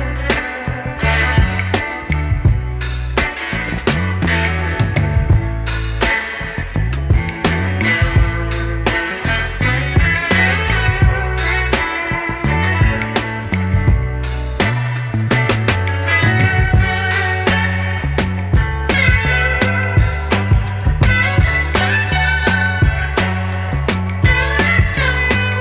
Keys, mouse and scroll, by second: 2.7 ctrl+s, 3.8 click, 7.9-20.1 drag, 20.1-20.5 scroll up 3, 20.5 ctrl+z, 20.8 ctrl+s, 20.9-21.3 scroll down 1, 21.3-22.5 drag, 22.6 ctrl+s, 23.4 r, 23.8 middle click.